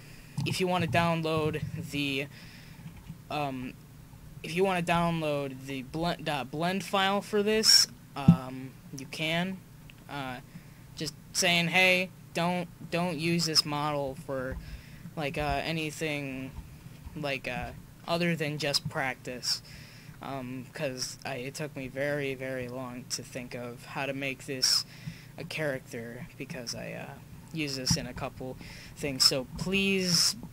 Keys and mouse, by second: 1.0-8.4 middle drag, 8.8 middle click, 9.2-9.8 drag, 13.2-17.0 right drag, 14.5 Tab, 15.4 Tab, 18.9-20.2 middle drag, 25.1 middle click, 26.2-28.4 middle drag.